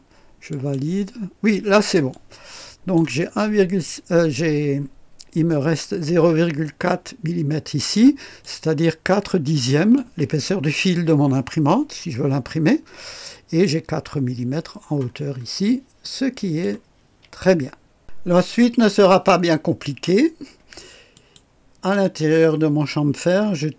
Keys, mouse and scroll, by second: 0.5 click, 2.1-3.1 drag, 3.3-3.7 scroll up 1, 8.4-10.1 drag, 11.7-13.9 drag, 15.1-15.4 scroll down 1, 16.0 click, 21.1 click.